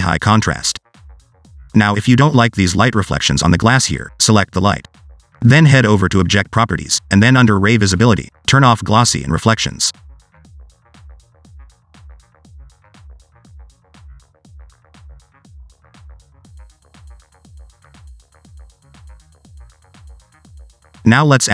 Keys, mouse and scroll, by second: 1.9-2.5 scroll down 1, 2.5-5.0 typing, 3.7 click, 4.5 right click, 6.2 click, 7.3 click, 8.0 click, 8.1-9.3 scroll down 9, 9.3 click, 12.6 click, 13.4 click, 15.4 click, 16.1 click, 18.1 click, 20.0 click.